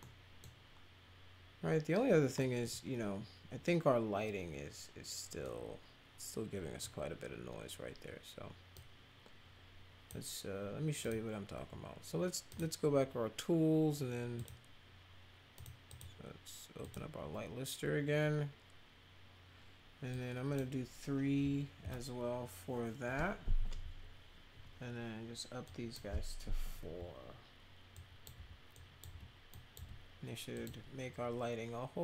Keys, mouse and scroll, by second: 0.0-0.4 middle drag, 2.3 middle click, 5.4-6.7 middle drag, 8.7-10.0 drag, 11.0 click, 12.5 click, 14.3 click, 15.5 click, 15.8 click, 16.8 click, 20.1 click, 21.8 3, 25.6 click, 27.9 click, 28.3 4, 28.7 click, 29.1 4, 29.5 click, 29.7 4, 30.5 click.